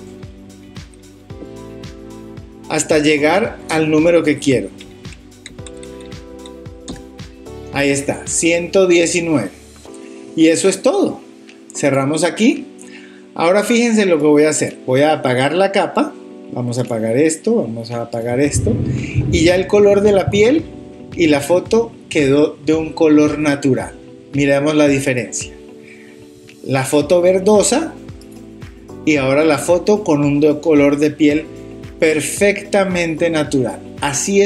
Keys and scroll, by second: 0.5 Up, 1.8 Up, 2.9 Up, 4.8 Up, 5.5 Up.